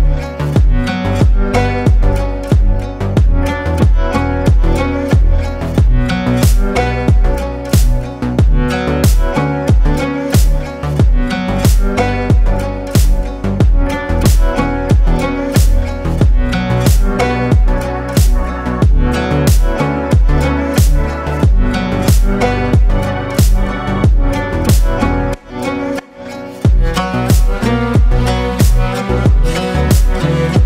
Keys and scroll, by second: 14.1 ctrl+space, 16.1 ctrl+space, 18.5 ctrl+space, 23.9 shift+space, 27.3 ctrl+shift+space, 28.2 ctrl+shift+space, 29.0 ctrl+shift+space, 29.6 ctrl+shift+space.